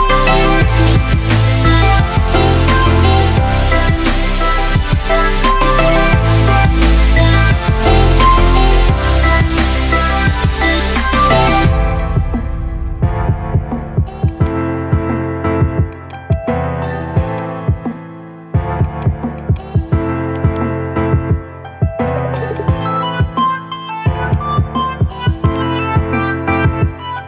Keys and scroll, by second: 0.0-1.4 typing, 3.7 BackSpace, 5.0 shift+o, 5.9 shift+n, 6.2 ctrl+a.